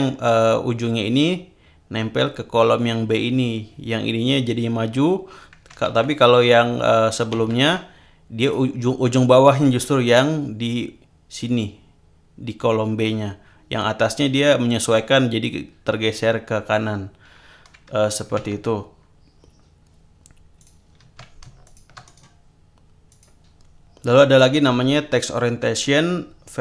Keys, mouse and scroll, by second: 5.8 ctrl+z, 7.3 ctrl+z, 8.4 click, 18.4 alt+Tab, 20.6 click, 21.6 shift+click, 22.0 shift+right click, 23.1 click.